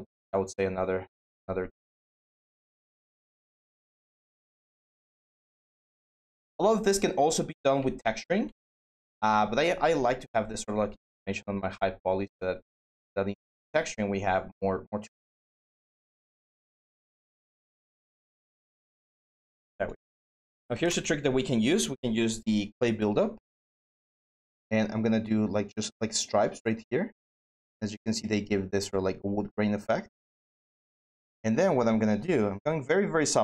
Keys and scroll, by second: 20.0-21.0 typing.